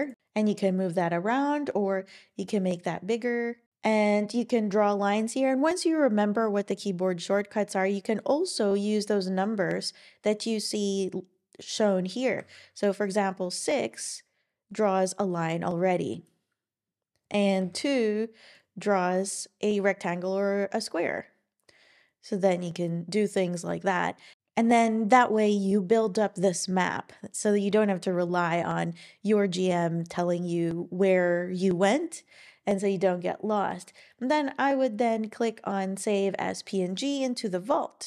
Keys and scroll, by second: 17.6 2.